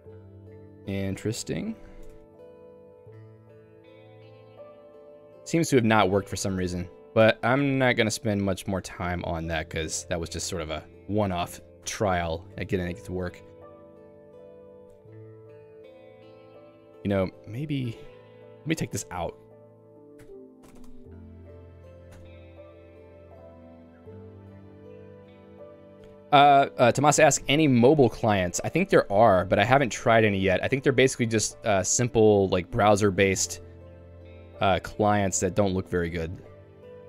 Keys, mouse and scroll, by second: 3.5 ctrl+g, 4.7 super+e, 6.6 l, 7.3 h, 7.7 q, 12.0 Return, 12.7 shift+g, 13.1 Escape, 13.6 k, 16.3 j, 18.0 k, 18.8 d, 19.2 k, 20.0 ctrl+s, 20.2 Escape, 21.2 shift+g, 21.5 a, 21.6 Up, 22.2 Return, 35.9 ctrl+g, 36.3 super+e.